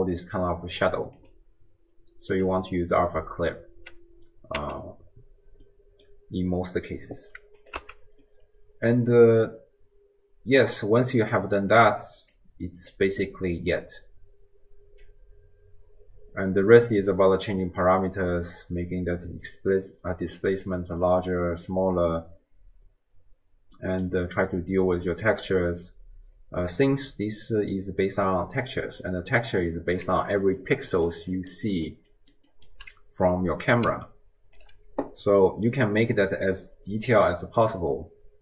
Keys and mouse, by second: 1.5-2.5 drag, 4.6 n, 5.7 middle click, 7.6 click, 7.9 x, 8.3 middle click, 9.6-11.6 middle drag, 12.3 click, 17.1-24.1 drag, 25.1-28.6 drag, 29.6-30.1 middle drag, 30.4-32.8 typing, 30.6 click, 30.9 click, 31.3 click, 31.6 click, 32.1 click, 32.5 click, 33.9 d, 34.1 click, 34.6 d, 35.5 middle click.